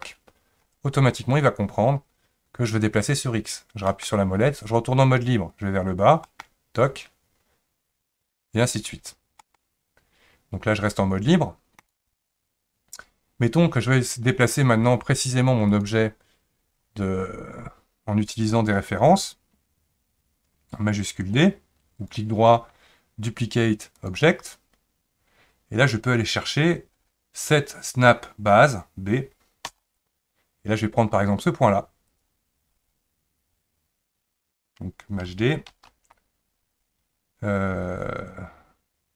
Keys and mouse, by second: 13.8 click, 15.7 click, 22.0-32.3 right drag, 35.7 shift+d.